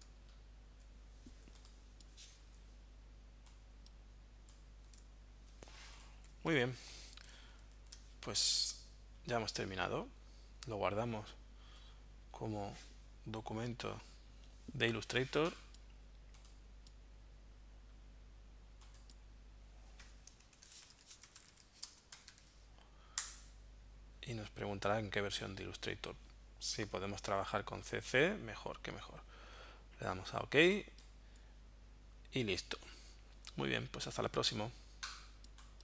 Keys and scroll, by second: 2.4 v, 7.6 super+1, 20.3-22.7 typing, 23.2 Return.